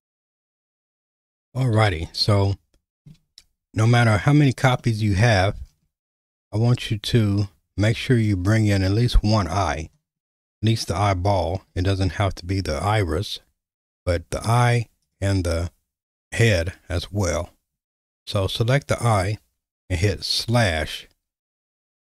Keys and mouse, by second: 0.0 alt+/, 2.3-3.1 shift+middle drag, 4.8-5.6 middle drag, 11.7 g, 15.1 click, 20.4 /.